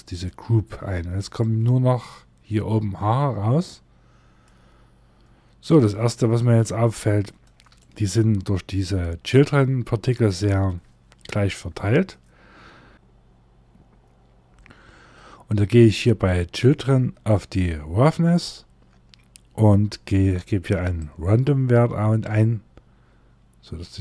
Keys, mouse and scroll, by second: 0.9 middle click, 4.5-5.2 scroll up 2, 6.1 shift+middle click, 7.3 middle click, 11.7 scroll down 1, 11.8-12.5 scroll up 3, 12.9 scroll down 1, 14.0 scroll up 2, 16.3 scroll down 1, 17.9 click, 18.3 scroll down 1, 20.5 click.